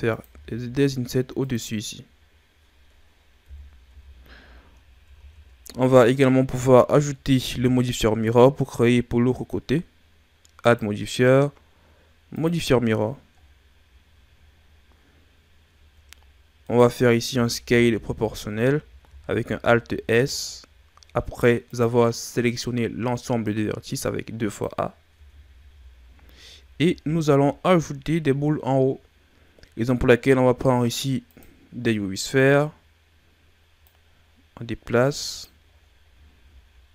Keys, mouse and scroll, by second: 0.2 i, 3.4 KP_1, 3.8 Tab, 4.4-5.6 scroll down 10, 5.1 a, 10.6 click, 13.3 scroll down 4, 14.5-14.9 scroll up 7, 15.7-16.2 ctrl+scroll up 4, 16.6 right click, 17.2 Tab, 17.6 a, 18.0 a, 19.0 alt+s, 23.4 click, 25.1 Tab, 25.5 a, 25.8-26.8 scroll down 4, 26.8 shift+a, 32.3 scroll down 5, 33.8 click, 35.6-36.9 scroll up 12.